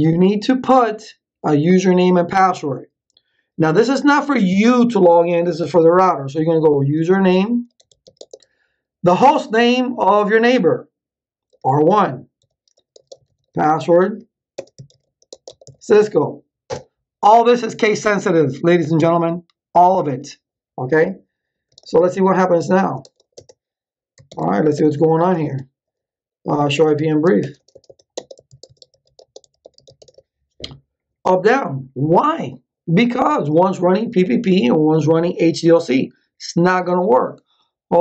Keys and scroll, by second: 6.5-8.5 typing, 11.5-16.4 typing, 16.6 Return, 21.2-23.7 typing, 24.2 ctrl+z, 24.7 Return, 26.3-30.4 typing.